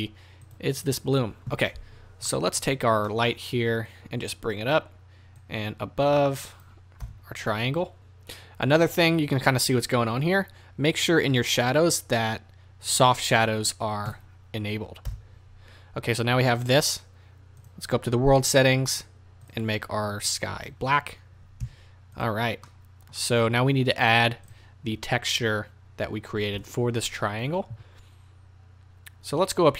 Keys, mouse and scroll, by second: 0.5 click, 0.8 click, 2.3-3.9 middle drag, 2.7-3.1 scroll down 2, 3.9-8.9 drag, 7.0 KP_0, 7.9-8.9 scroll up 2, 8.9-11.1 middle drag, 11.1-12.9 drag, 11.4-12.9 scroll down 2, 14.1 click, 15.1 KP_0, 17.6 click, 19.5 drag, 21.6 z, 22.6-24.4 middle drag, 24.4 click, 26.5 KP_0.